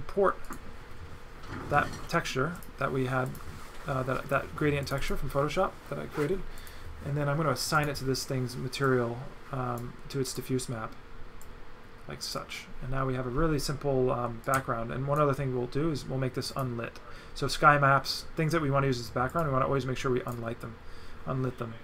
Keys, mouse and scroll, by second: 0.4 right click, 2.6 click, 3.3 click, 4.8 click, 6.6 click, 7.8 click, 8.9 click, 10.3 click, 11.5 click, 14.4 right click, 16.6 click, 19.3 click, 20.3 click.